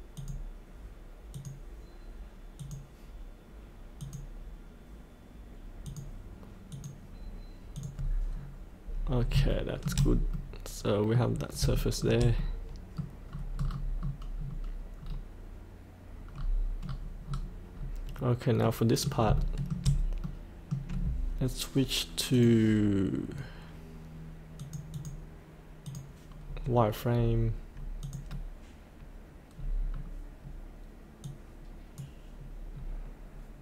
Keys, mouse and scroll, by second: 1.5 click, 8.4 scroll up 1, 9.5 shift+middle click, 10.3 middle click, 11.8 shift+middle click, 12.4 middle click, 13.5 scroll down 1, 16.3 scroll up 1, 18.6 middle click, 19.3 shift+middle click, 20.2 middle click, 22.3 click, 26.4 scroll up 1, 28.0 click, 29.5-29.9 scroll up 1, 29.9-31.2 scroll down 1, 31.2 click, 32.7-33.6 scroll up 1.